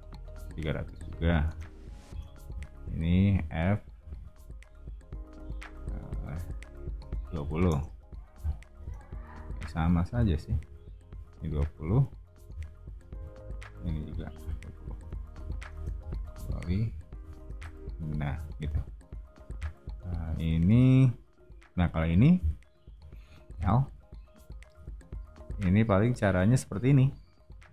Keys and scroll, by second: 0.6-2.1 typing, 3.4 f, 7.1-8.8 typing, 10.1 p, 12.5-15.7 typing, 17.5 BackSpace, 18.2 o, 23.5 l, 27.4-27.7 typing.